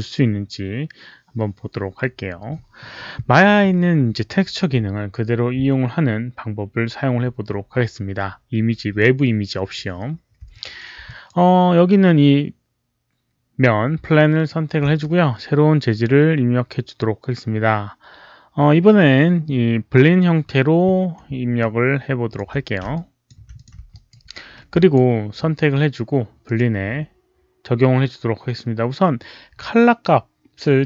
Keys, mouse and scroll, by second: 10.4 alt+click, 10.9 alt+drag, 14.0-14.4 alt+middle drag, 15.0-20.0 right drag, 21.2 right click, 21.2 alt+middle click, 21.5-22.3 alt+drag, 21.6 right click, 21.6 alt+middle click, 22.8-23.2 alt+drag, 23.4 click, 23.9-24.6 alt+right drag, 24.6 alt+drag, 26.3 alt+click, 26.3 alt+right click.